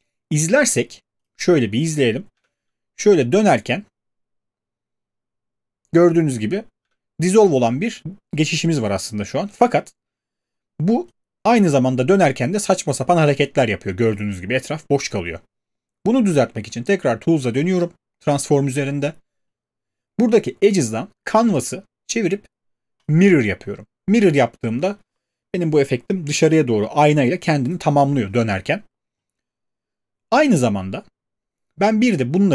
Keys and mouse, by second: 0.6 click, 1.3 click, 2.4 click, 6.8 space, 14.1 click, 17.6 click, 21.4 click, 23.1 click.